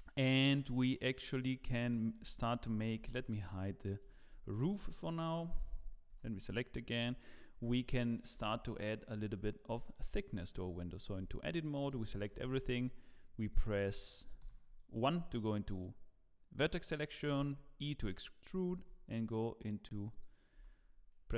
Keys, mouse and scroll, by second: 0.7 middle click, 1.5 scroll up 4, 1.9 shift+middle click, 2.5-3.1 scroll down 9, 3.0 Tab, 3.1 click, 4.0 h, 5.6 click, 6.1 Tab, 7.0 KP_7, 7.9 shift+middle click, 8.4 scroll up 3, 8.8 shift+middle click, 9.3 scroll up 1, 9.7 shift+middle click, 10.4 Tab, 11.1 Tab, 12.3 e, 14.4 1, 20.5 z, 21.1 scroll up 1.